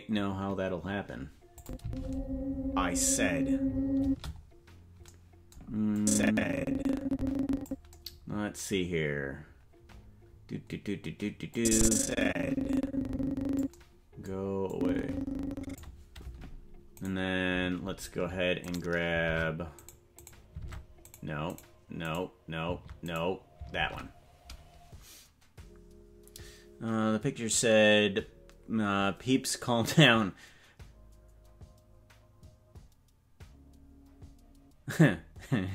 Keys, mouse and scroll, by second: 1.6 click, 1.8 space, 4.0 space, 5.9-7.7 drag, 11.5-13.6 drag, 14.7-15.8 drag, 17.2 right click, 17.9 ctrl+Tab, 18.7 right click, 19.2 ctrl+Tab, 20.3 right click, 20.6 ctrl+Tab, 21.6 right click, 22.1 right click, 23.8 ctrl+Tab.